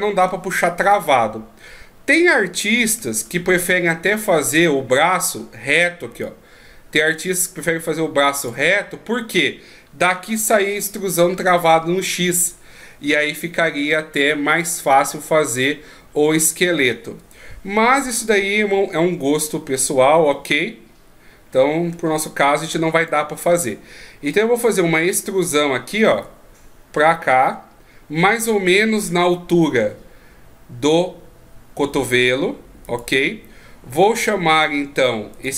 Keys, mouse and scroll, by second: 3.1-3.6 ctrl+scroll up 2, 3.6-4.4 ctrl+scroll down 2, 4.4-6.1 ctrl+scroll down 1, 6.1 d, 6.2 click, 8.5 d, 17.2 d, 17.3 right click, 23.1 d, 26.1 e, 33.9-34.6 scroll down 1, 34.6 right click, 35.3 right click.